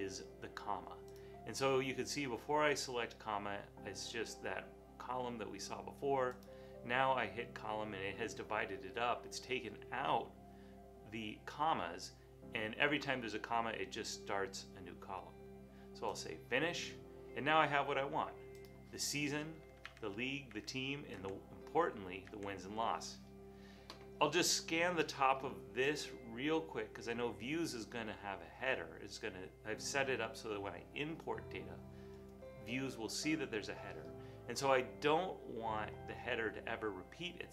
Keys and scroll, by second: 20.1 Right, 20.5 Right, 21.2 Right, 22.3 Right.